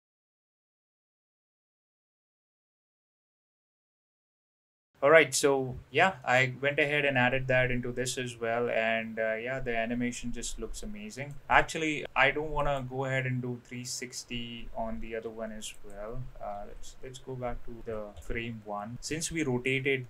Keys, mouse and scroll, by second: 0.1 middle click, 0.5 click, 0.9 middle click, 0.9 click, 1.5 middle click, 1.7 middle click, 1.9 click, 2.0 BackSpace, 2.2 click, 2.5 middle click, 2.7 click, 3.0 drag, 3.1 middle click, 3.6 middle click, 4.0 click, 4.2 click, 4.7 middle click, 4.7 space, 6.2-11.3 middle drag, 12.0 space, 12.6 click, 15.1 ctrl+z, 15.8 click, 16.5 ctrl+z, 17.8 ctrl+z, 18.2 ctrl+z, 19.1-20.0 middle drag.